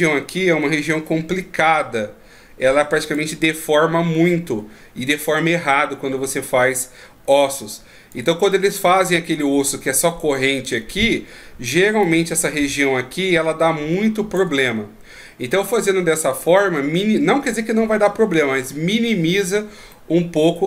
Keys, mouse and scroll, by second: 3.1 d, 3.3 d, 6.6 d, 6.7 right click, 8.1 d, 9.8 d, 12.0 d, 12.0 click, 14.4 d, 16.0 d, 16.2 right click, 19.9 middle click.